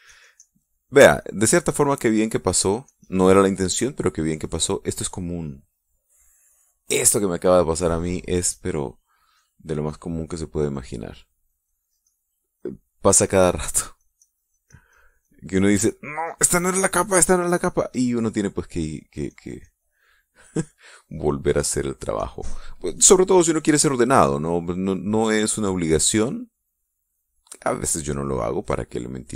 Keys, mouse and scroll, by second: 0.7 middle click, 0.7-1.9 drag, 2.0 click, 3.0-4.2 drag, 4.7 click, 5.1 click, 7.3 click, 8.9 click, 10.5 click, 11.5 click, 12.1-13.1 drag, 13.4-14.5 drag, 14.8-16.3 drag, 16.3 click, 16.9-17.9 drag, 18.1 click, 19.1 click, 19.7 click, 23.0 click, 25.0-26.5 drag, 26.7-28.7 drag, 29.2-29.3 drag.